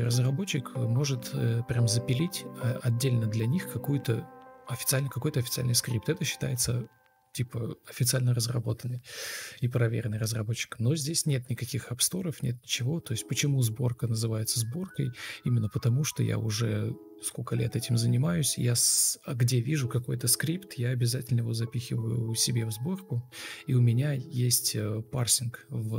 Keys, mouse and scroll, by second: 0.6 2, 1.1 Escape, 1.2 Escape, 1.4-1.8 F2, 1.9 BackSpace, 2.2 Escape, 2.9 ctrl+d, 4.0 ctrl+z, 4.6 ctrl+d, 5.9 ctrl+z, 9.3 ctrl+c, 9.4 ctrl+d, 9.9 ctrl+v, 10.7 shift+t, 11.1 Escape, 11.4 shift+t, 12.0 Escape, 12.5 ctrl+space, 13.0 ctrl+u, 13.8 Down, 14.5 Up, 14.6 Up, 15.0 shift+Down, 15.1 space, 18.2 Delete, 18.6 ctrl+v, 18.7 ctrl+z, 21.1 ctrl+z, 21.4 ctrl+space, 24.2 ctrl+space, 25.0 Delete, 25.6 Right, 25.6 Left, 25.7 Up, 25.8 Down.